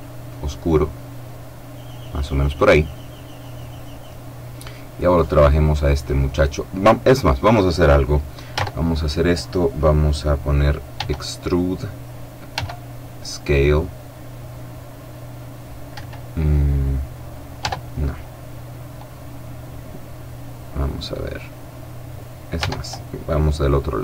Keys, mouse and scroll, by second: 4.8 right click, 8.3 Tab, 10.7 e, 12.2 s, 15.6 Escape, 17.3 Tab, 22.3 Tab, 23.8 e.